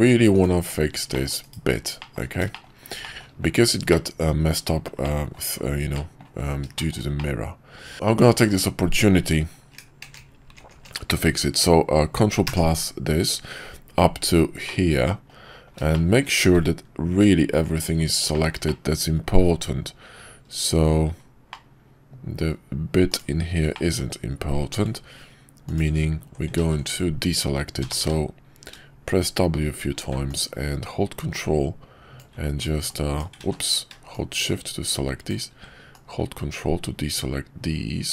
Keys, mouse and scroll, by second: 1.1 middle click, 2.0 middle click, 2.0 /, 2.5 shift+middle click, 3.0 shift+middle click, 3.9-4.5 middle drag, 5.0-5.3 middle drag, 5.9-6.2 middle drag, 6.7 shift+middle click, 7.2-7.8 middle drag, 7.9 Tab, 10.0-13.3 ctrl+KP_Add, 14.7 middle click, 15.9 shift+middle click, 18.3 shift+middle click, 18.6 middle click, 21.5 middle click, 23.1 shift+click, 23.7 shift+middle click, 26.7 ctrl+z, 27.8 w, 28.0 w, 31.0-32.3 ctrl+drag, 33.5 ctrl+z, 36.4-38.1 ctrl+drag.